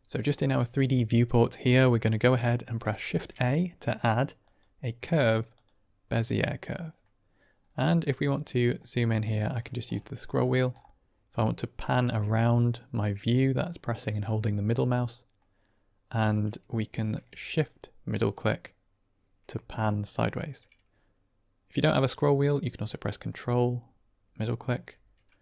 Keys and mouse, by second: 2.0-2.5 middle drag, 6.5-6.9 middle drag, 11.4-15.4 middle drag, 17.3-19.4 shift+middle drag, 23.2-24.6 ctrl+middle drag.